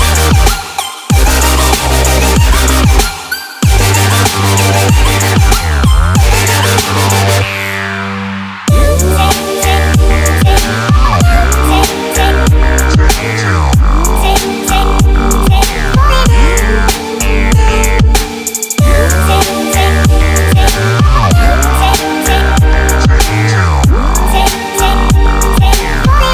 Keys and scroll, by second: 10.8 Escape, 13.4 Escape, 20.0 1, 20.1 ., 20.2 5, 24.6 1, 24.7 ., 24.8 5.